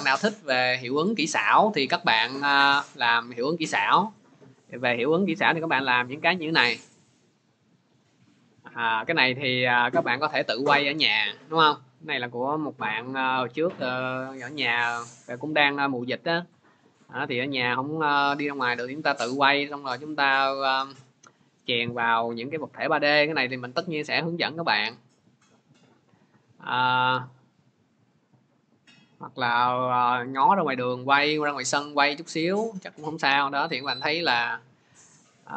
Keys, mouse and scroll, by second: 23.1 click, 24.1 click, 24.2 click, 28.4-29.3 drag.